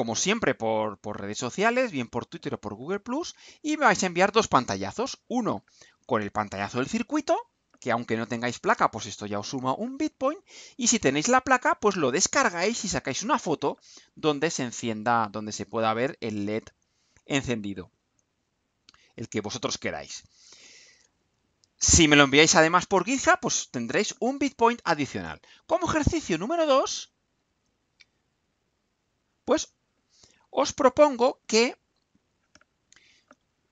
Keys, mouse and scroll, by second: 29.0 click.